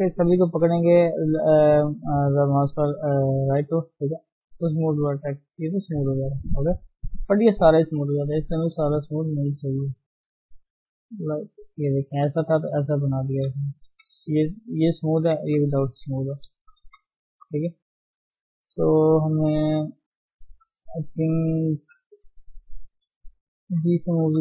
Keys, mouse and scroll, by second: 0.1-1.0 scroll up 2, 1.0-6.1 middle drag, 1.0-2.2 scroll up 1, 2.2-5.2 scroll up 1, 5.6 scroll up 1, 5.8 Tab, 6.1-6.5 scroll down 3, 6.5-7.6 middle drag, 8.7 ctrl+z, 11.0 click, 11.5 ctrl+z, 12.5 ctrl+shift+z, 13.5 ctrl+z, 14.0 ctrl+shift+z, 16.1 ctrl+z, 16.8 ctrl+z, 17.1 ctrl+z, 20.1 click, 20.7-21.4 scroll up 4, 21.5 middle click, 22.2 scroll up 1, 22.4-23.7 middle drag, 23.7 g.